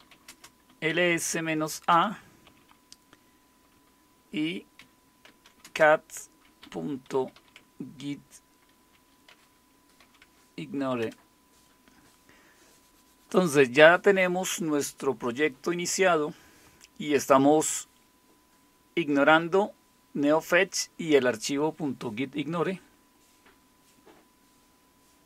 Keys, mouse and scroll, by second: 0.0-1.9 typing, 4.5-7.8 typing, 9.3-11.0 typing.